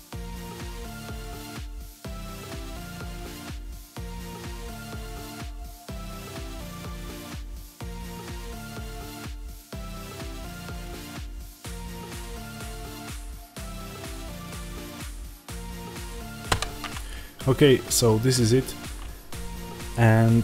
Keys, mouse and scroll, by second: 0.6 a, 1.2 click, 2.6-4.8 drag, 3.8 Return, 4.3 Tab, 4.8 middle click, 5.0 scroll down 2, 5.1 z, 5.6-6.6 middle drag, 6.6 click, 7.1 z, 7.4 click, 7.6-11.0 middle drag, 7.8-8.2 scroll up 2, 8.2-11.0 scroll down 2, 11.0 click, 11.7 scroll down 1, 11.8 middle click, 12.6 z, 12.7-14.9 middle drag, 14.9 KP_0, 16.4 click.